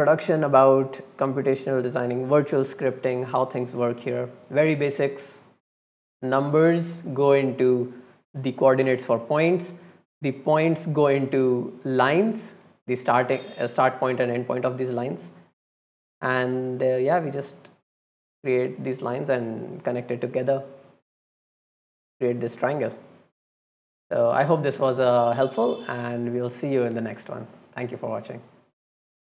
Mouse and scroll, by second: 3.8 middle click, 4.3 right click, 4.9 right click, 7.5 right click, 9.0 right click, 10.5 right click, 15.8-16.3 right drag, 16.5 scroll down 1, 16.8 click, 17.8 right click, 20.2 right click, 22.7-24.4 right drag.